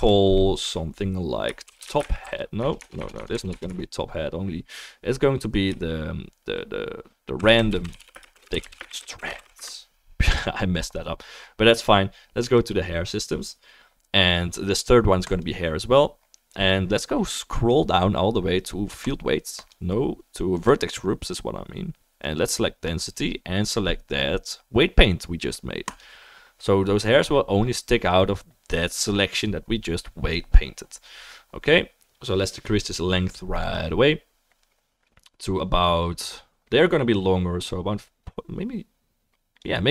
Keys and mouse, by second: 2.8 BackSpace, 3.1 BackSpace, 3.5 BackSpace, 3.7 BackSpace, 15.2 click, 19.0-39.9 drag, 19.0-39.9 middle drag.